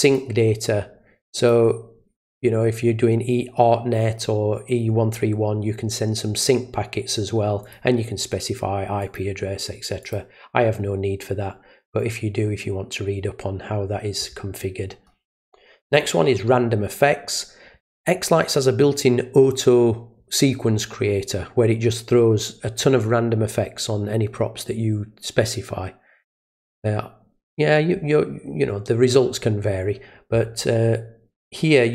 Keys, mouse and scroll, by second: 0.0 click, 1.4 click, 7.6 click, 9.0 click, 10.0 click, 15.9 click.